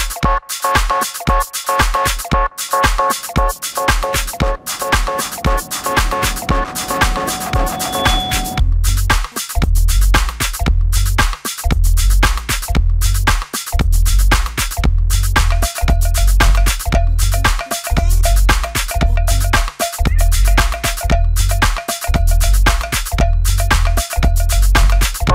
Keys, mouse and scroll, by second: 0.5 space, 0.6 Escape, 5.6 Escape, 9.7 Escape, 14.9 Escape, 15.7 shift+v, 15.8 shift+right click, 18.4 space, 18.5 Escape, 18.7 Escape, 20.1 shift+middle click, 23.3 shift+middle click, 24.6 shift+middle click, 25.0 space.